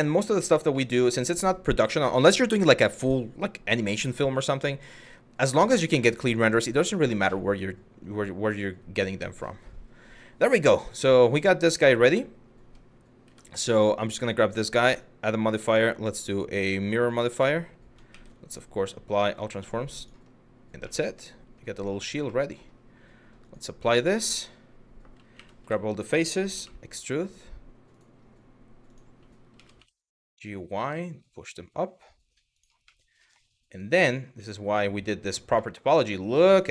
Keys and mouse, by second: 0.5 middle click, 12.3 Tab, 12.9 Tab, 14.5-16.6 drag, 17.7 ctrl+a, 20.5-21.2 middle drag, 21.4 click, 22.0 middle drag, 23.0-23.6 drag, 23.9 Tab, 25.0 3, 25.3 a, 28.5 click, 29.4 y, 32.2 click, 32.6 middle click, 35.2-36.6 middle drag.